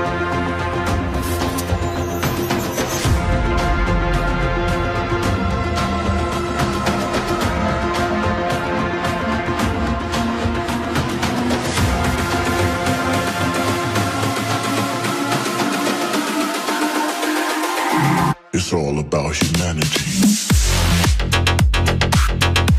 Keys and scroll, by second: 3.4 Tab, 4.0 Tab.